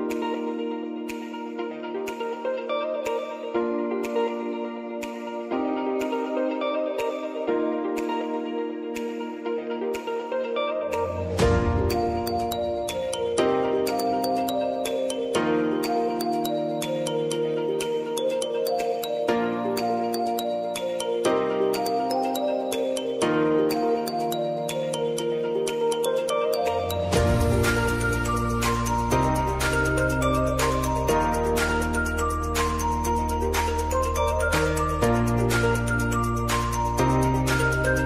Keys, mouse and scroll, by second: 1.6 click, 3.3-3.8 typing, 4.6 click, 7.4 ctrl+d, 8.0 click, 11.2 ctrl+t, 11.3 click, 11.6 ctrl+a, 12.9 shift+a, 13.9 click, 14.8 u, 17.7 click, 20.4 ctrl+k, 21.7 shift+a, 23.1 click, 26.6 click, 27.0 ctrl+d, 27.9 click, 29.8 ctrl+a, 30.5 shift+r, 32.0-35.0 drag, 35.8 ctrl+k, 36.5 shift+r, 37.8 click.